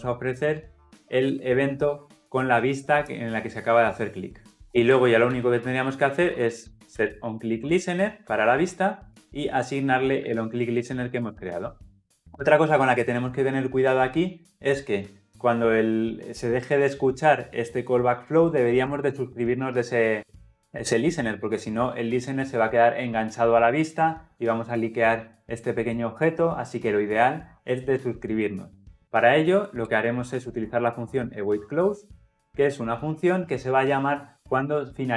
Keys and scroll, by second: 1.8 Escape, 9.1 Return, 32.7 Return.